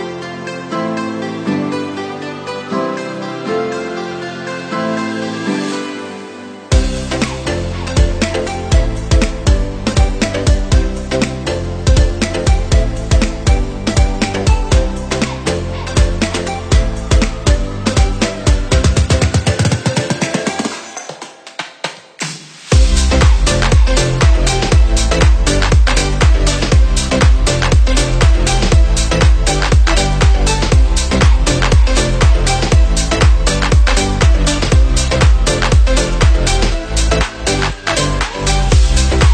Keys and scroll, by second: 0.3 space.